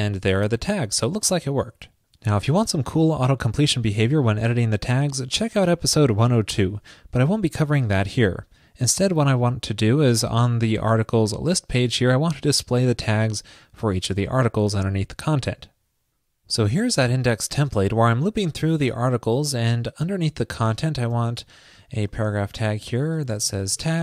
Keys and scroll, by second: 22.3 ctrl+shift+<.